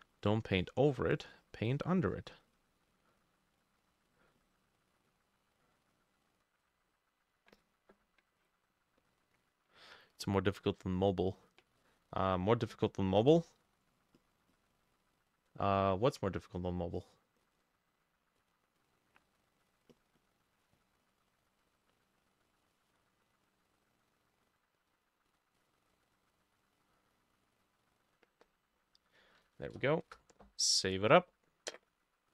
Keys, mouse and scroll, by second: 11.8-13.8 drag, 11.8 middle click, 14.2-17.0 drag, 19.7-25.4 drag, 26.2-32.1 drag, 29.4 ctrl+middle click, 29.5 ctrl+s, 30.1 Return.